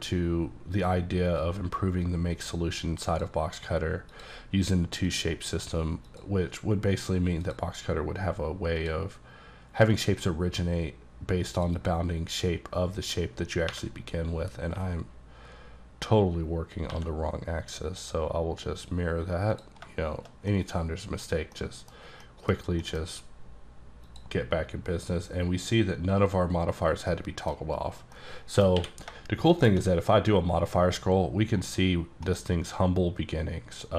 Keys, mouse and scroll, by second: 0.4-1.4 scroll down 2, 1.5 click, 4.2 click, 6.1 click, 7.5 click, 8.9 click, 10.0 click, 11.6 click, 11.8 double click, 13.8 3, 14.8 3, 16.9 2, 19.6 click, 20.6 middle click, 21.3 scroll down 2, 21.6 middle click, 22.0 scroll down 2, 22.3 middle click, 22.9 scroll down 1, 23.0 middle click, 24.1 click, 27.2 middle click, 27.7 scroll up 1, 28.2 middle click, 28.8 scroll down 1, 28.8 q, 29.6 shift+click, 30.0 scroll up 2, 30.5-31.2 scroll down 11, 31.2-31.7 scroll up 6, 31.9-32.4 scroll down 4, 32.4-33.9 middle drag.